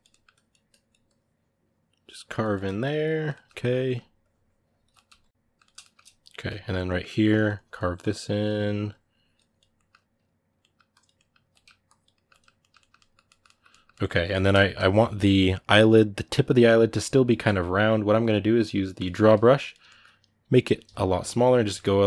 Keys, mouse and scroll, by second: 0.1-2.3 ctrl+drag, 2.3 middle click, 2.6 ctrl+click, 2.9-4.0 ctrl+middle drag, 4.0 ctrl+click, 4.7 middle click, 5.1 ctrl+click, 5.3-7.1 ctrl+middle drag, 7.1-9.5 ctrl+drag, 9.5-10.7 ctrl+middle drag, 10.7 ctrl+click, 10.9 ctrl+middle click, 11.6 ctrl+click, 11.9-16.8 ctrl+middle drag, 16.8-19.6 drag, 19.6 ctrl+middle click, 20.6 f, 21.3 click, 21.5 ctrl+middle click, 21.9 click.